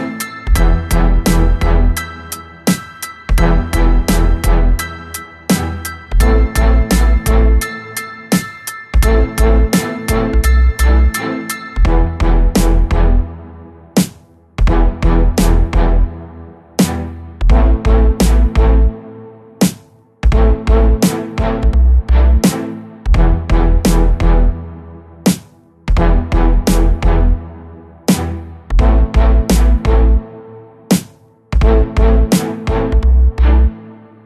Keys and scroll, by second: 0.5 w, 1.7 Escape, 6.1 2, 6.7 alt+c, 9.7 Escape, 10.3 b, 15.9 0, 16.2 Return, 17.3 w, 18.3 Escape, 18.5 3, 19.2 l, 19.7 b, 21.3 Escape, 22.4 2, 23.5 b, 24.1 Escape, 25.5 3, 27.5 b, 29.7 b, 32.9 b.